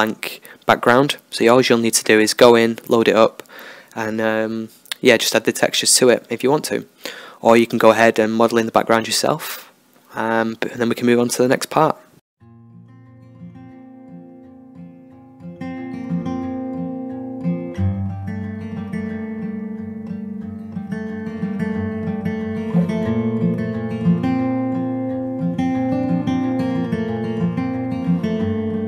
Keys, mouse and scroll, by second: 0.4-1.4 drag, 1.4 middle click, 1.4 x, 2.6 Tab, 2.9-5.5 middle drag, 4.8 Tab, 4.8 click, 5.5 ctrl+r, 6.0 Tab, 6.2-7.2 middle drag, 6.6 space, 9.8 Tab, 10.3 middle click, 10.8 KP_1, 11.1 middle click, 11.2 KP_3, 11.5-16.0 middle drag, 12.1 KP_1, 16.0 right click, 16.0 x, 16.5 Tab, 17.2-19.3 drag, 19.3 Tab, 19.3-20.5 middle drag, 20.5-21.7 drag, 21.7 e, 24.9 s, 28.3 click.